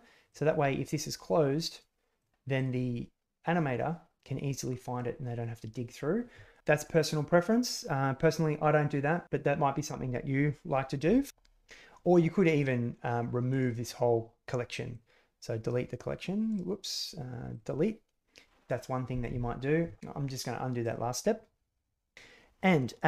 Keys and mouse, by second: 0.2 click, 12.5 click, 13.4-15.3 drag, 16.4-17.5 drag, 20.0 ctrl+z.